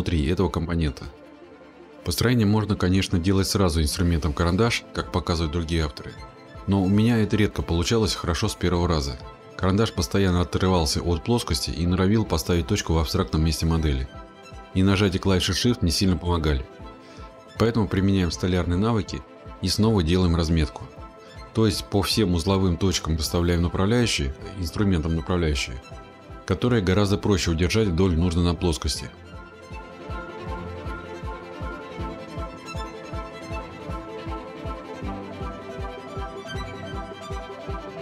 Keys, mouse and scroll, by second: 1.3 click, 4.5 click, 11.6-13.7 scroll, 13.9-14.8 scroll, 16.8 click, 18.2 click, 22.4 click, 23.2-23.7 scroll, 27.8 click, 29.8 click, 31.7 click, 31.8-32.6 scroll, 32.8 click, 33.2 scroll, 33.7 click, 33.9 scroll, 34.4 click, 34.6 scroll, 35.4 click, 35.5 scroll, 36.2 click, 36.3 scroll, 37.3 click, 37.4-37.8 scroll.